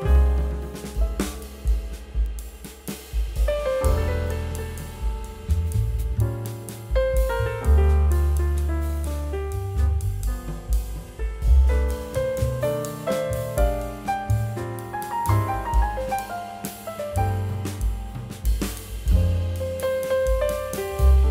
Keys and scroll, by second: 7.3 b, 13.2 ].